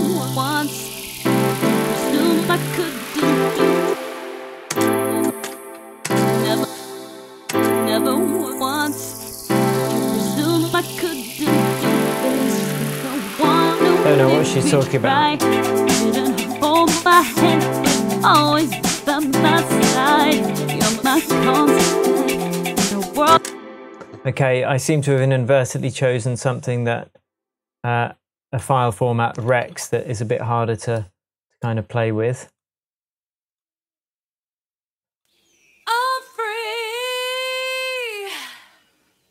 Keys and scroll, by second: 3.1 BackSpace, 3.9 space, 5.7 space, 5.8 z, 6.0 space, 6.6-7.3 space, 12.7 Tab, 22.6 Left, 23.3 space.